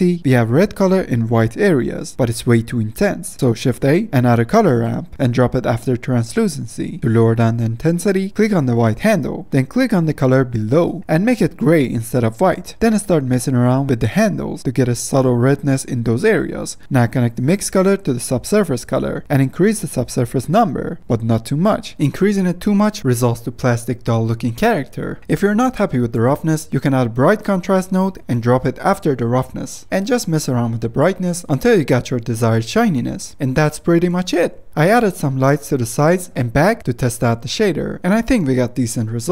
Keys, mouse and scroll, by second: 0.1 middle click, 0.4-0.7 scroll down 3, 0.7-1.3 middle drag, 1.3-2.1 scroll down 4, 2.1 drag, 2.9-3.3 drag, 3.3 shift+a, 7.1 middle click, 7.2 scroll up 2, 7.6-8.5 drag, 8.5 F10, 9.3-10.9 drag, 12.9 click, 34.1 middle click, 34.6-37.4 typing, 35.1 middle click, 36.4 middle click, 36.5 scroll up 3, 36.8 click, 37.9 middle click, 38.5 click.